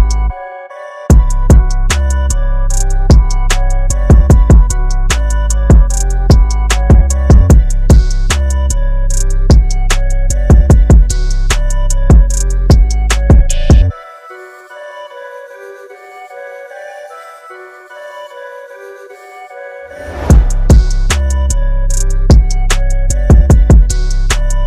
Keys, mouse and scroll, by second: 0.0 click, 2.3 KP_2, 2.4 KP_5, 3.4 click, 5.5 scroll up 1, 6.2-7.2 scroll down 1, 9.5-10.9 scroll up 1, 11.1 click, 11.8 KP_0, 12.8 click, 14.4-15.0 scroll up 1, 15.0-16.5 scroll down 1, 16.5-17.8 scroll up 1.